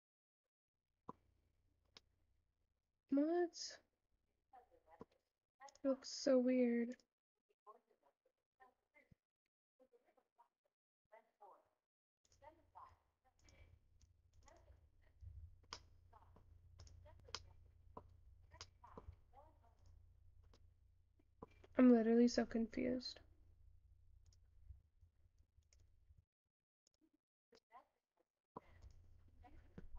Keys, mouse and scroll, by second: 14.1-18.6 drag, 18.6-29.9 shift+middle drag.